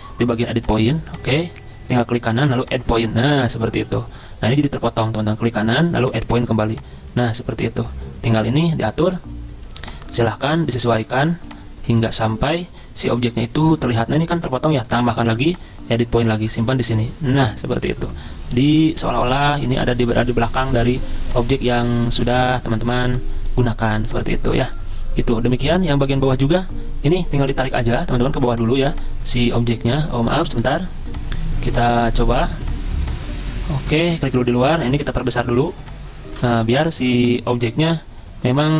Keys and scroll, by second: 30.0 ctrl+z.